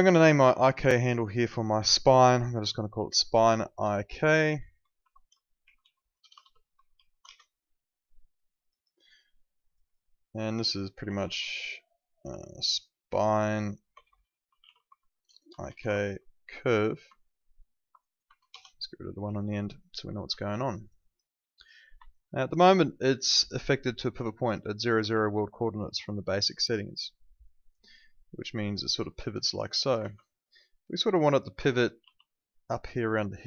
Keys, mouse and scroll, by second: 3.1-7.4 typing, 8.6 click, 10.9 Left, 13.7-16.5 typing, 17.0 Right, 18.2 BackSpace, 18.5 Return, 20.3 alt+middle click, 20.6 alt+right click, 21.0 alt+click, 21.3 alt+middle click, 21.5 alt+right click, 22.1 alt+right click, 22.8 alt+middle click, 23.0 alt+right click, 23.2 alt+click, 24.2 alt+click, 25.0 e, 25.7 click, 30.1 z, 31.0 click, 31.6 ctrl+z, 32.0 ctrl+2.